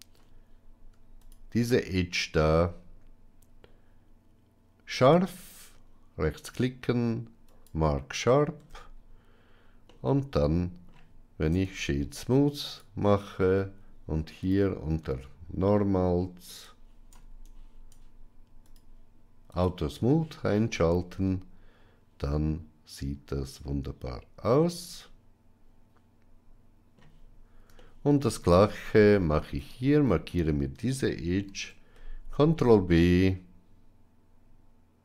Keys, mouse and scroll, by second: 8.5 Tab, 9.8-10.8 middle drag, 14.3 click, 18.5 click, 19.4 click, 20.7-24.3 middle drag, 24.3-24.9 scroll up 1, 24.9-26.9 middle drag, 27.7-28.1 shift+middle drag, 28.4 Tab, 29.4 alt+click, 31.4 ctrl+b.